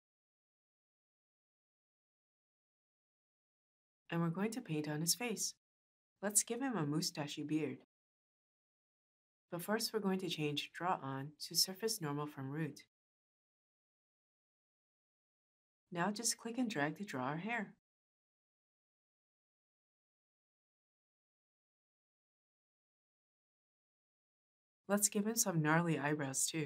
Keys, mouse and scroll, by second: 0.2 Return.